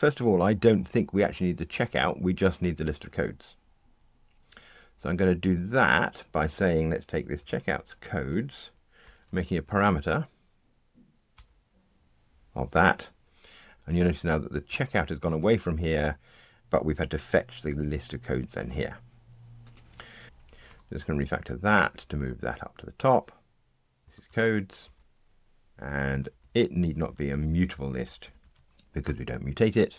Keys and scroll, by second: 7.1 alt+Up, 9.0 alt+super+p, 25.7 super+F6, 29.0 Delete.